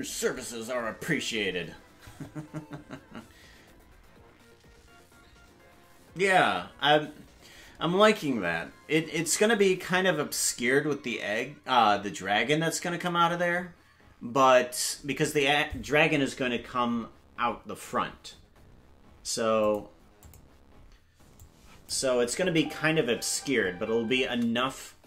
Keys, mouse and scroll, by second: 19.6 click, 20.2 click, 21.4 click, 22.4 space.